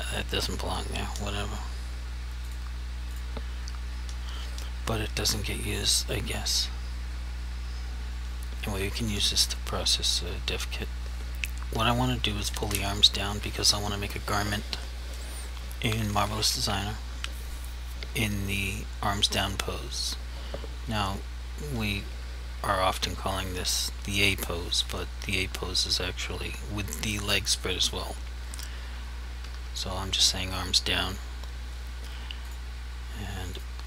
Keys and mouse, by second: 2.5 click, 29.5 1, 32.5 click.